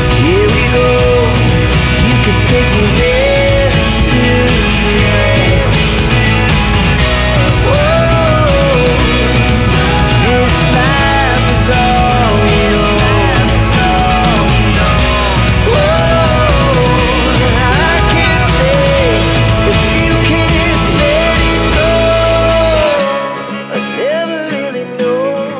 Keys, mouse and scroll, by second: 0.5 ctrl+click, 7.3 click, 10.3 click, 16.7 click, 17.7 right click, 18.6 click, 18.9 right click, 19.4 click, 20.0 click, 24.2 click, 25.3 click.